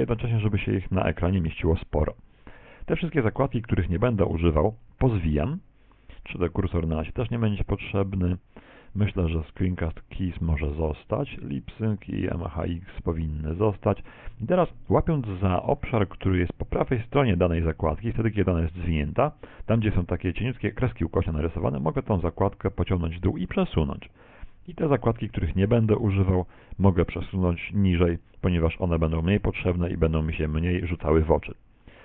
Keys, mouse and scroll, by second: 3.4 click, 22.0 click, 26.6 click, 29.8 click.